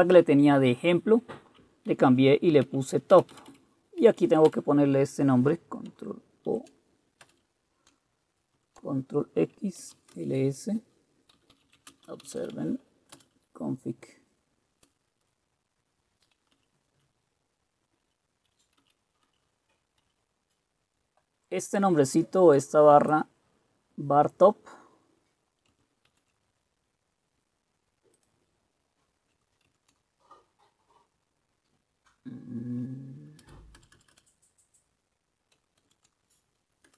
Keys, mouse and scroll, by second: 1.8-4.6 typing, 6.6 ctrl+o, 7.4 Return, 8.7 ctrl+x, 9.7-13.0 typing, 13.3 Return, 16.6 Down, 18.1 Up, 18.9 Down, 19.3 Down, 20.1 Up, 26.2 ctrl+x, 29.8 ctrl+x, 33.5 Return, 33.9 Return, 34.0 Return, 34.2 Return, 35.9 ctrl+q.